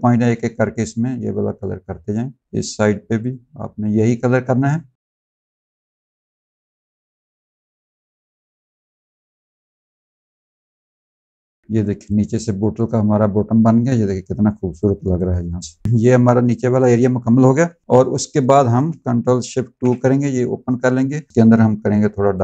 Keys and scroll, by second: 11.6 z, 15.8 z, 16.3 space, 17.4 v, 19.4 ctrl+alt+2, 21.3 ctrl+z.